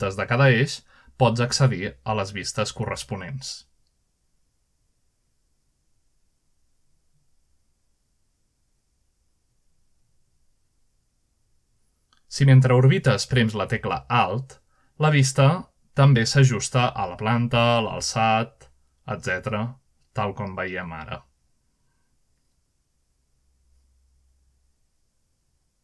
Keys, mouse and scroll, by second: 1.6 click, 2.7 click, 4.0 click, 5.5 click, 7.1 middle click, 7.6 click, 8.8 click, 10.1 click, 11.3 click, 13.1-13.9 scroll up 2, 21.7-22.1 alt+middle drag, 23.6 alt+middle drag, 24.8 alt+middle click.